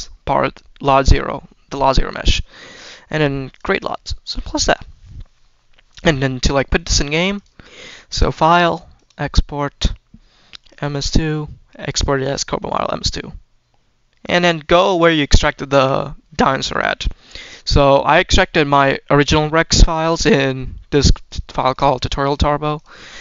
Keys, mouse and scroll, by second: 2.4 click, 3.4-3.8 drag, 4.2-6.4 scroll down 1, 7.2-13.0 drag.